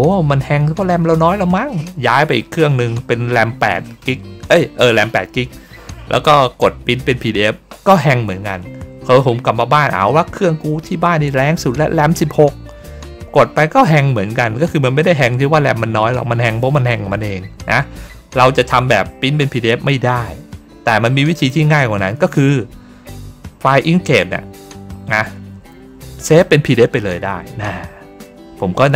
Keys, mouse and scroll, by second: 21.2 click, 26.1 click.